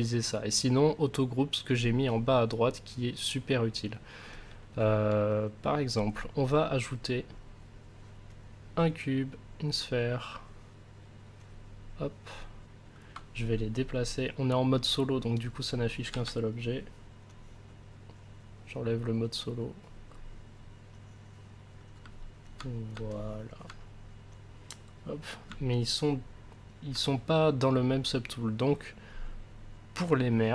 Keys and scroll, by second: 16.1 w.